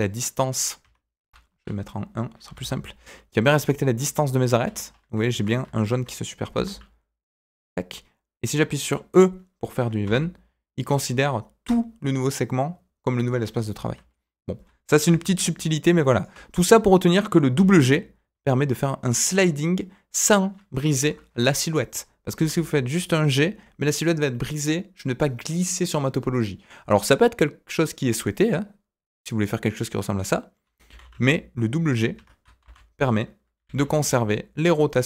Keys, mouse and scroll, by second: 1.5 KP_1, 2.4 g, 4.8 scroll up 2, 5.2 shift+middle click, 5.4 scroll up 2, 5.7 shift+middle click, 6.5 g, 13.9-15.0 scroll down 3, 15.0 d, 15.1-16.2 right drag, 16.2 d, 16.3 d, 16.5 middle click, 16.9 scroll up 2, 17.1 middle click, 17.5 g, 21.3 KP_1, 22.3 g, 30.8 g, 32.6 ctrl+z, 33.5 g.